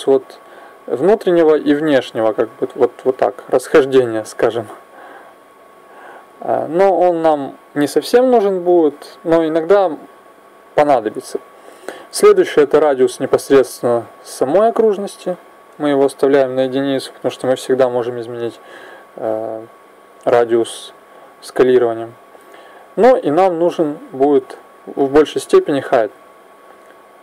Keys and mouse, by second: 4.8-8.6 drag, 15.1-25.7 drag.